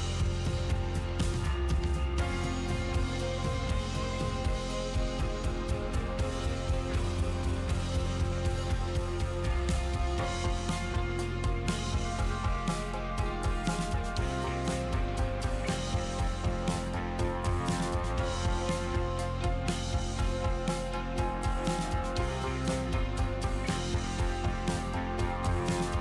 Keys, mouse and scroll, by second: 1.0-1.6 scroll up 5, 1.2-2.9 middle drag, 5.0-6.3 middle drag, 6.3 s, 11.0 g, 12.9 middle click, 13.5 g, 18.0-19.1 middle drag, 22.7 s.